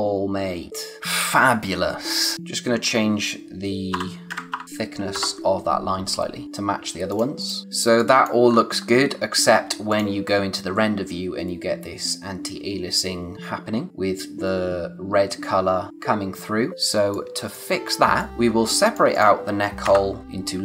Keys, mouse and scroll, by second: 1.0 space, 2.3 click, 5.1 click, 6.4 click, 7.6 scroll down 1, 7.8 space, 8.0 click, 8.3 space, 8.5-8.9 scroll up 1, 9.9 click, 16.7 click, 18.0 space, 18.2 click, 18.5 space, 18.7 click, 19.8 Return, 20.2-20.6 typing.